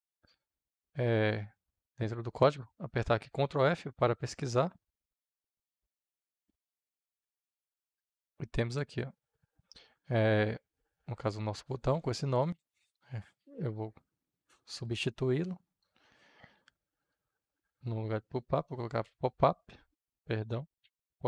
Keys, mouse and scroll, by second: 1.9 middle click, 3.3 ctrl+f, 4.6 ctrl+v, 5.9 click, 6.8-10.0 scroll down 2, 10.0-11.0 scroll down 1, 11.0-12.7 scroll down 1, 13.3 scroll down 2, 13.3 click, 14.5 ctrl+v, 15.5-18.4 drag, 18.4 Return, 18.9 o, 20.3 Return, 20.7 o.